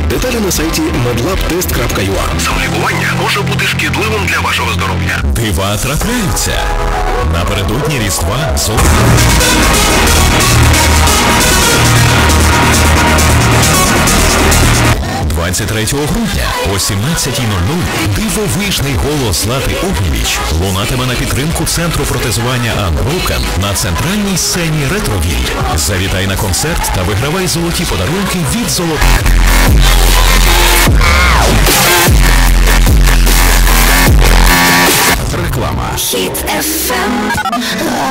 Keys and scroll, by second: 15.0 Page_Down, 35.7 Page_Down.